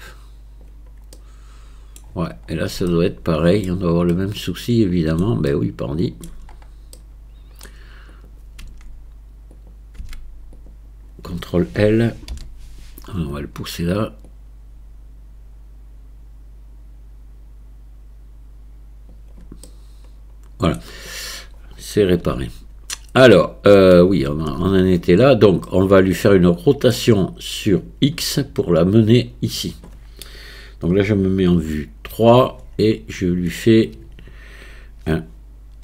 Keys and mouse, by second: 1.1 middle click, 2.9 shift+middle click, 4.1-5.2 middle drag, 5.5 shift+middle click, 7.1 click, 7.1 right click, 8.2 click, 8.7 Tab, 9.6 click, 10.0 Tab, 10.6-11.8 drag, 12.3 ctrl+l, 14.3-19.1 drag, 19.7-20.7 middle drag, 22.2 a, 23.3 middle click, 24.5 Tab, 25.7-26.9 middle drag, 31.6 KP_3.